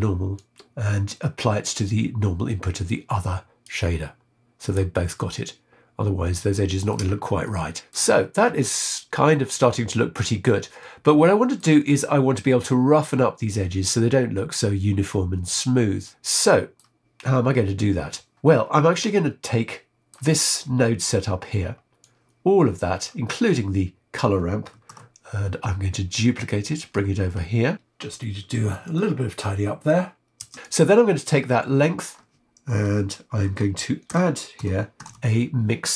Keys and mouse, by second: 0.3-3.7 drag, 6.3 middle click, 7.6 shift+middle click, 10.8 middle click, 16.4 middle click, 17.3-18.3 middle drag, 18.9-20.1 middle drag, 21.9-23.0 drag, 23.5 middle click, 24.9 shift+d, 27.3 click, 27.8 click, 28.2 click, 28.5 click, 28.7 click, 29.3 click, 29.7 click, 30.5 click, 33.5 shift+a.